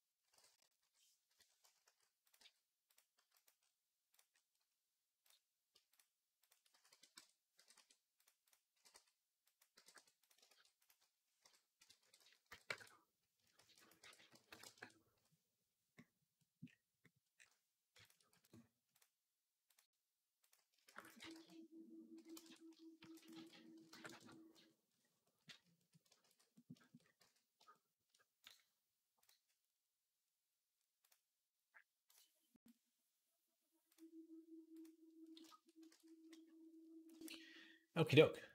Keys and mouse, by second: 0.6 ., 1.6 s, 2.2 g, 3.0 s, 3.5 ., 5.7 shift+click, 5.8 shift+middle click, 6.2 shift+click, 6.3-10.5 shift+middle drag, 6.6 s, 7.4 g, 8.5-11.8 typing, 13.4 shift+d, 13.8 r, 15.9 middle click, 16.8-25.3 middle drag, 18.1 x, 18.7 click, 19.5 click, 20.2 click, 20.6 shift+d, 21.0 r, 22.8 shift+d, 23.1 r, 25.3 shift+click, 26.1 ctrl+s, 26.3 middle click, 26.5 shift+click, 27.0 z, 27.7 shift+click, 35.1 middle click, 36.5-38.5 middle drag, 37.9 click, 38.4 x.